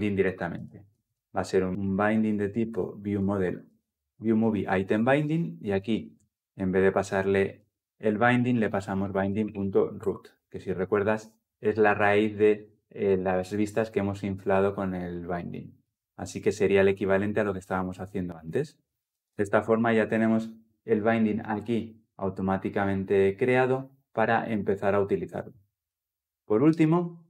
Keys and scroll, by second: 1.7 ctrl+z, 2.9 ctrl+z, 3.0 Return, 8.9 Return, 19.0 ctrl+alt+l, 19.2 ctrl+alt+o.